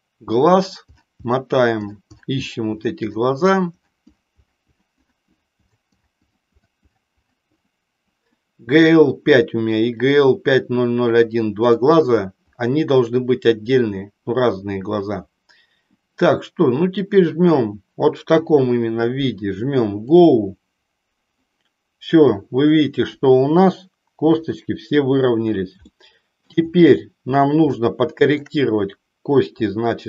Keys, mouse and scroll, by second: 20.2 click, 24.4 KP_3, 26.0 shift+middle click, 27.8 shift+middle click.